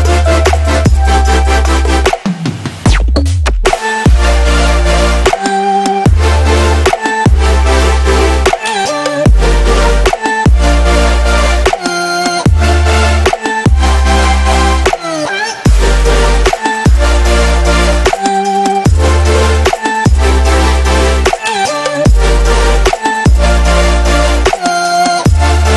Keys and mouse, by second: 0.9 ctrl+c, 1.6 click, 4.3 ctrl+v, 4.9 click, 7.8 ctrl+c, 8.6 click, 11.2 ctrl+a, 11.5 ctrl+v, 12.0 click, 15.2 ctrl+c, 15.9 click, 18.7 ctrl+a, 19.0 ctrl+v, 19.5 click, 22.4 ctrl+c, 23.2 click.